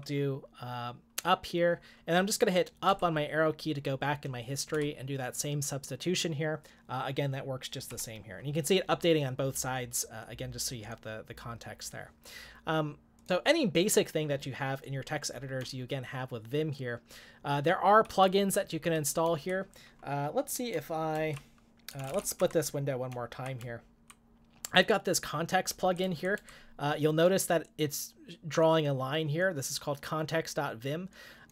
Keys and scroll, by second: 2.9 Up, 4.7 Return, 8.0 u, 15.7 j, 16.1 j, 21.1-23.6 typing, 25.7 k, 25.9 k, 26.0 k.